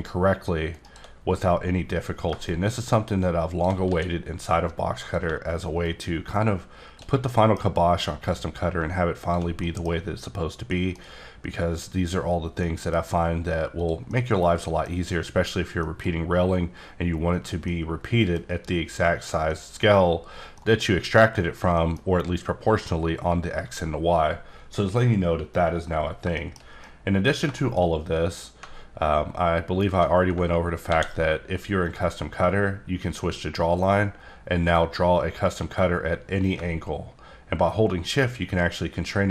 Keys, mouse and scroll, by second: 0.7 shift+right click, 2.5 shift+click, 3.8 s, 5.0 click, 6.2 shift+click, 7.3 middle click, 8.1 click, 9.6 middle click, 10.7 middle click, 12.6 middle click, 13.8 click, 14.4-15.0 middle drag, 17.7 middle click, 19.4 middle click, 20.1 scroll up 3, 20.4 scroll down 1, 20.6 middle click, 21.7 middle click, 25.6 scroll down 1, 26.3 shift+middle click, 28.1 scroll up 1, 28.8-29.5 alt+scroll down 1, 29.5-30.1 alt+scroll down 1, 30.9 ctrl+d, 31.9 click, 33.8 click.